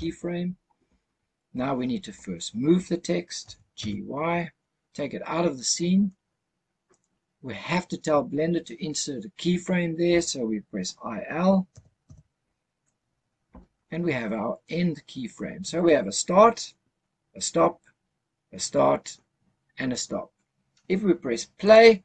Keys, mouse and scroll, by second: 3.3 g, 3.7 y, 6.8 click, 11.6 i, 21.5 click.